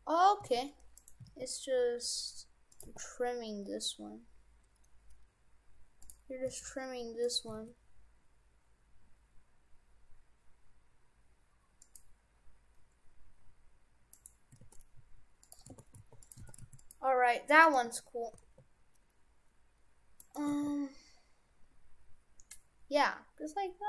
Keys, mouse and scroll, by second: 0.4 s, 1.2 s, 2.9 g, 6.5 s, 7.5 s, 14.1 right click, 14.7 shift+f, 15.7 shift+f, 16.5 shift+f, 17.6 right click, 17.9 Tab, 18.3 r, 20.5 r.